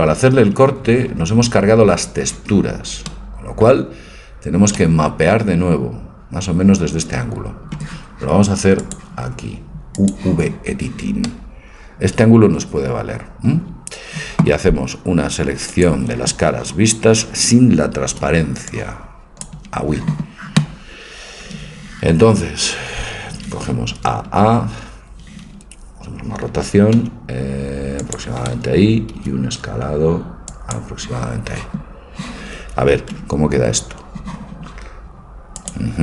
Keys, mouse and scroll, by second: 3.1 middle click, 4.1 middle click, 4.3-6.7 middle drag, 8.8-11.3 drag, 15.7-17.6 drag, 18.2 b, 24.0 a, 24.3 a, 27.0 r, 29.1 s, 33.2 Tab, 35.6-36.0 drag.